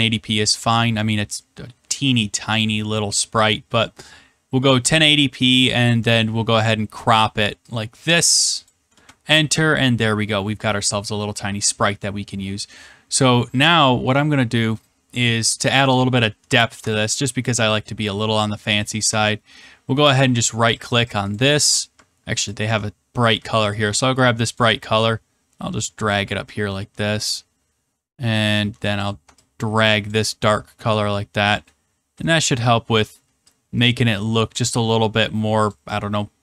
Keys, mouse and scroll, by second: 1.7 scroll, 1.8 middle click, 1.9 middle click, 2.4 middle click, 2.7 middle click, 2.8 middle click, 3.5 middle click, 3.9 middle click, 6.6 click, 8.6 click, 10.3 scroll, 11.0-11.4 scroll, 15.2 middle click, 16.1 middle click, 17.7 click, 20.3 ctrl+click, 20.8 ctrl+click, 20.9 ctrl+click, 22.4 ctrl+click, 23.7 ctrl+click, 24.5 click, 26.0 click, 29.0 ctrl+click, 30.1 click, 30.6-31.1 scroll, 31.6 scroll, 32.3-32.6 scroll, 34.1 shift+click, 35.7 click.